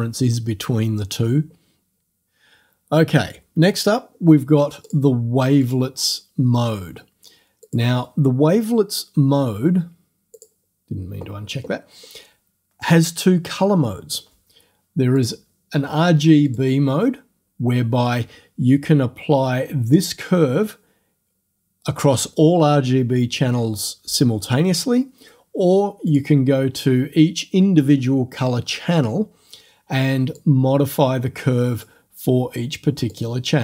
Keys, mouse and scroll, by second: 4.9 click, 5.7 click, 7.7 click, 10.4 click, 15.2 click, 16.5 click, 26.1 click, 30.4-32.0 drag, 33.1 click.